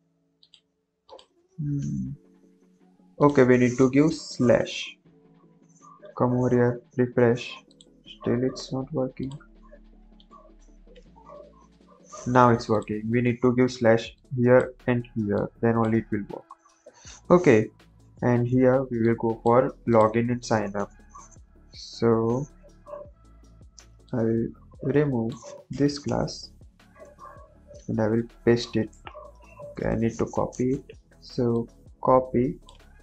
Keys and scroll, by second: 1.4 Tab, 1.8 ctrl+s, 4.6 ctrl+s, 10.2 ctrl+s, 25.6 BackSpace, 26.0 Return, 26.6 Right, 26.9 Return, 27.2 Up, 28.1 ctrl+v, 28.8 BackSpace, 32.8 ctrl+c.